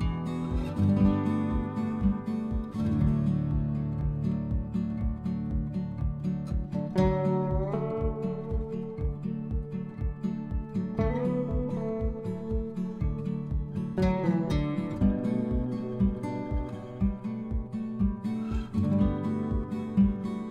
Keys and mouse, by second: 1.4 click, 1.4 click, 1.8 middle click, 1.8-2.9 typing, 5.7 click, 6.0 middle click, 7.2 Tab, 7.5 click, 8.2 click, 8.9 click, 11.0 click, 12.2 click, 13.3 middle click, 15.9 middle click, 18.6 click, 19.2 middle click.